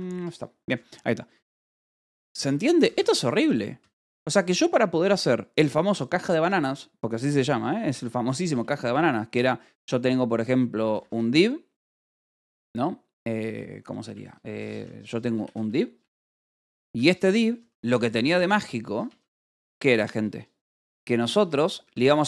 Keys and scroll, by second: 0.1 Return, 0.7-3.7 typing, 3.2 Escape, 7.8 a, 8.4 Return, 10.6-12.0 typing, 13.4 Return, 14.3-18.2 typing, 19.4 BackSpace, 20.1 Left, 21.1-22.2 typing.